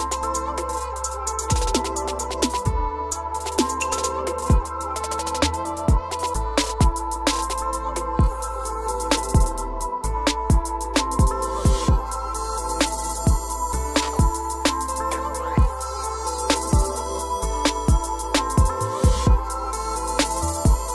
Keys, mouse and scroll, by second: 1.2 click, 2.4 click, 3.2-4.2 scroll, 4.9 scroll, 5.9 click, 6.7 click, 7.5-8.6 scroll down 7, 9.4 scroll down 1, 10.2 Escape, 10.6 middle click, 11.3 click, 11.5 click, 11.7 click, 13.5 p, 15.0 click, 15.9-16.6 typing, 16.8 Return, 19.4 click, 19.6 click, 20.8-20.9 scroll.